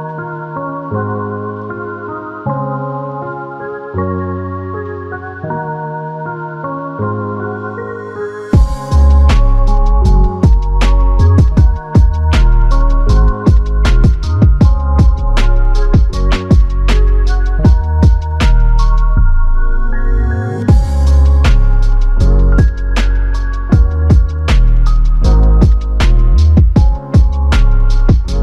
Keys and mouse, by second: 26.8 double click.